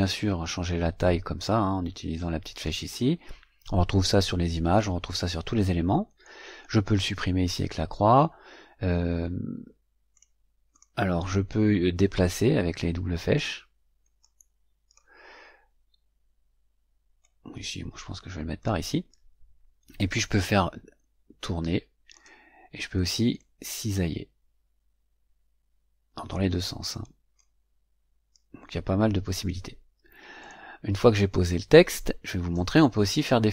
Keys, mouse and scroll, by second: 0.0-2.8 drag, 10.0 click, 10.6 click, 11.9-13.5 drag, 14.1 click, 17.1-18.8 drag, 20.3-22.2 drag, 23.3-26.4 drag, 27.3-29.4 drag, 30.3 click.